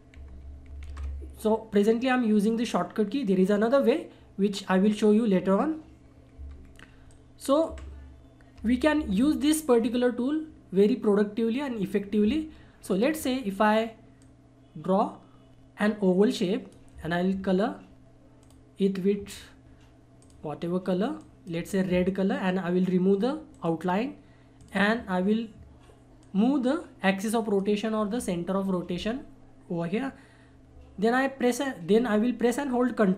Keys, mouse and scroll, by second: 0.1 ctrl+r, 1.8-3.6 scroll down 1, 6.4 Delete, 7.1 click, 7.7 Delete, 8.9 shift+F4, 12.9 click, 12.9-18.4 drag, 23.5 right click, 24.6 click, 24.6-30.1 drag.